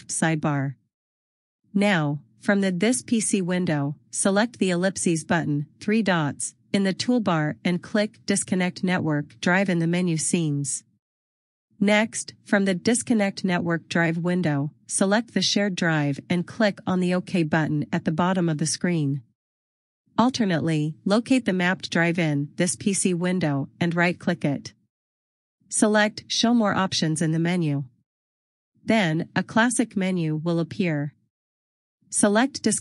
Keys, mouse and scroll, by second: 9.1 click, 11.6 click, 24.2 click, 27.5 click, 28.3 right click, 32.6 click.